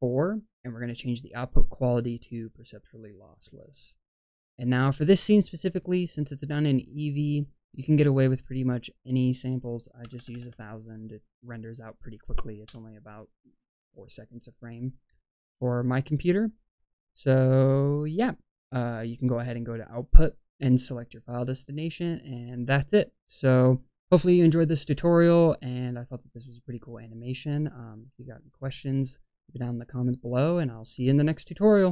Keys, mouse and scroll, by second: 1.0-3.2 drag, 4.5-5.2 scroll up 1, 5.2-7.4 scroll up 3, 7.4 scroll up 2, 7.5-8.5 drag, 9.0-12.7 drag, 10.2 KP_0, 10.4 KP_0, 18.0 click.